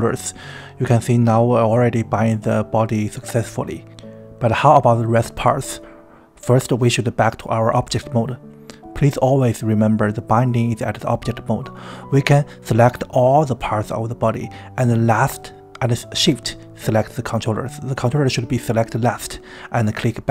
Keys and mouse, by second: 0.1 right click, 4.6 Tab, 9.0-9.3 drag, 11.8-12.9 drag, 14.9 shift+click, 15.8 shift+click.